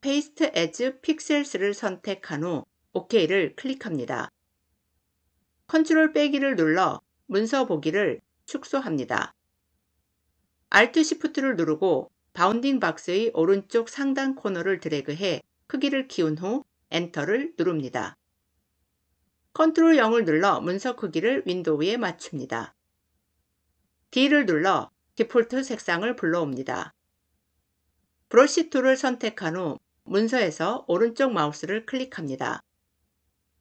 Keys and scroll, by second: 5.7 ctrl+-, 16.5 Return, 19.5 ctrl+0, 24.1 d, 28.3 b.